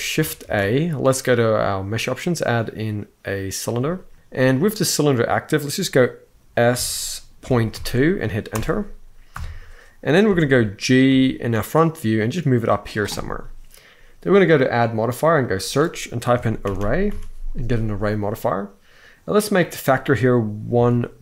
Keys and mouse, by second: 0.2 shift+a, 4.1 ., 4.1 1, 4.3 middle click, 6.4 s, 7.2 ., 7.5 2, 8.3 Return, 9.1 KP_1, 10.1 shift+middle drag, 10.8 g, 14.3-17.8 drag, 16.5 r, 19.1-21.2 drag.